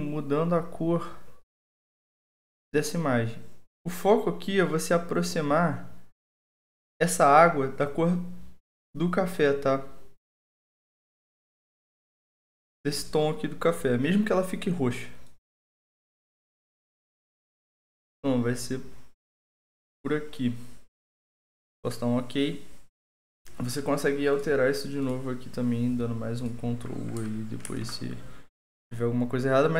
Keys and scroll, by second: 27.6 ctrl+u.